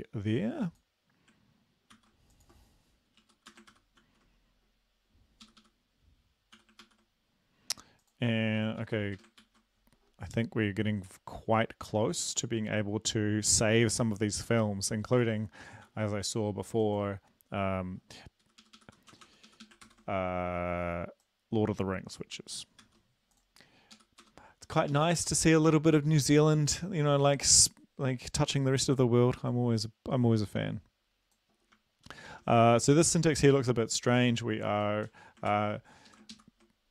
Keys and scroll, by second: 2.0 ctrl+c, 3.3 Down, 3.5 Return, 3.8 ctrl+v, 4.1 ctrl+s, 5.5 Up, 5.6 Up, 6.6 u, 6.9 ctrl+s, 9.0 Up, 9.2 BackSpace, 9.4 ctrl+s, 15.9 ctrl+c, 18.5 Up, 18.7 Up, 18.8 Up, 19.2 Return, 19.3 Return, 19.5 Up, 19.7 Up, 19.9 ctrl+v, 22.9 ctrl+c, 24.0 Up, 24.3 Return, 25.0 Up, 25.2 ctrl+v, 32.1 shift+Left, 33.0 ctrl+c, 35.1 Down, 35.5 ctrl+v, 36.1 Left.